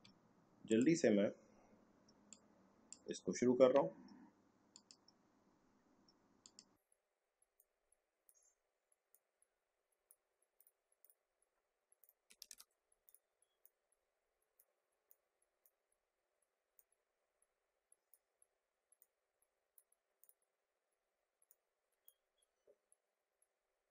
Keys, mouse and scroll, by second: 0.7 click, 2.1 space, 2.3 click, 2.5 space, 4.7-10.5 drag, 12.5 ctrl+z, 13.0-16.7 drag, 16.7-20.2 drag, 21.5-23.3 drag.